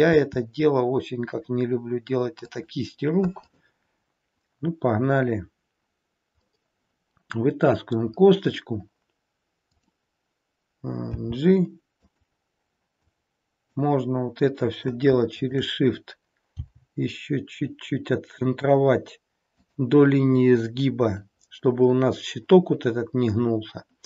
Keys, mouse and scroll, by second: 3.4 click, 6.5 middle click, 9.6 click, 11.1 g, 13.0 click, 15.4 shift+click, 16.6 g.